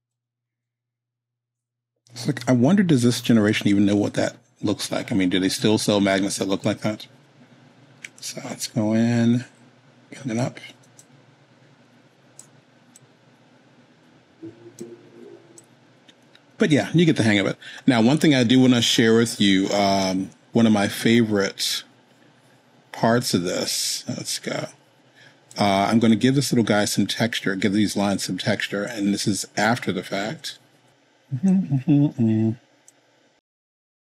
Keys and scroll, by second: 30.2 super+z.